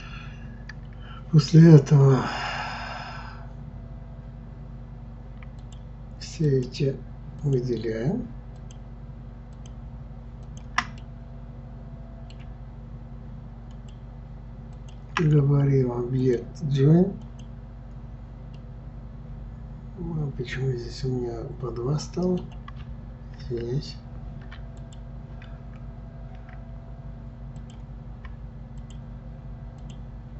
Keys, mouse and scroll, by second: 1.9-2.7 scroll down 2, 2.7-3.6 scroll up 1, 5.6 shift+click, 6.5 shift+click, 7.4 shift+click, 8.6 shift+click, 9.6 shift+click, 10.4 shift+click, 11.0-13.7 middle drag, 13.7 shift+click, 14.7 shift+click, 16.2-18.6 drag, 18.6-21.6 middle drag, 23.6 ctrl+z, 24.8 click, 27.6 click, 28.8 shift+click, 29.8 shift+click.